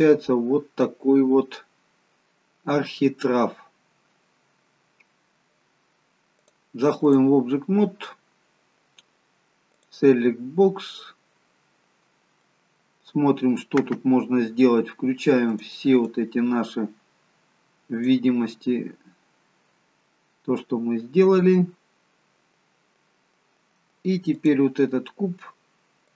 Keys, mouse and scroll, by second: 4.3-5.0 scroll down 1, 6.5 click, 8.0 scroll down 1, 9.9 click, 10.5-12.9 scroll down 2, 11.0 middle click, 15.6 click, 16.1 click, 20.1-20.7 scroll down 1, 20.7-21.1 scroll down 1, 21.1-22.3 scroll down 8, 22.6-23.2 scroll down 6, 24.5 click.